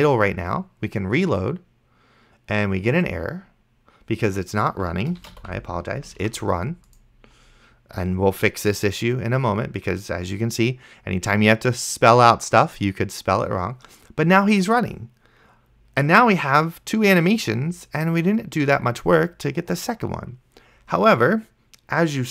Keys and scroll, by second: 5.1-6.1 typing, 6.5 ctrl+s.